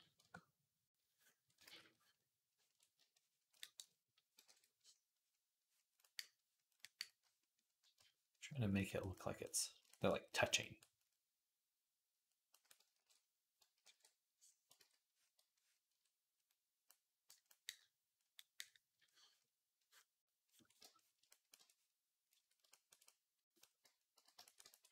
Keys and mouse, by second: 1.5 ctrl+z, 4.3 alt+q, 12.8 alt+q, 13.7 alt+q, 14.6 ctrl+z, 17.2-21.2 drag, 22.6 ctrl+click, 24.0 v, 24.6 ctrl+v, 24.7-24.9 drag, 24.7-24.9 middle drag, 24.7-24.9 right drag.